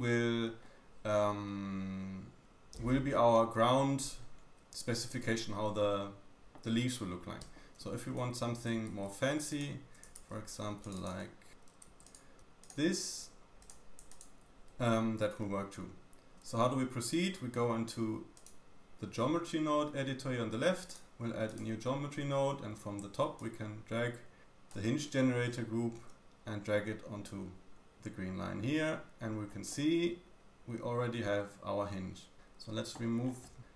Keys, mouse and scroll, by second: 0.6-1.2 scroll down 2, 1.2-2.0 scroll up 4, 2.4-2.9 scroll up 2, 2.9 scroll down 2, 3.2-7.9 drag, 7.4 Tab, 7.8-8.4 scroll up 2, 8.5 ctrl+r, 8.7 click, 9.6-12.0 middle drag, 10.2 ctrl+r, 11.9 2, 12.0 click, 12.4 x, 13.6 click, 14.1 ctrl+click, 14.3 ctrl+middle click, 14.5 Tab, 14.5 g, 14.8 scroll down 2, 15.4 scroll up 1, 15.5-17.2 middle drag, 17.2-18.0 scroll up 1, 18.0-18.3 scroll up 1, 18.3-24.7 drag, 24.7-28.4 middle drag, 26.0 g, 28.4-29.2 scroll up 3, 28.6-33.7 middle drag, 29.2-29.7 scroll up 3.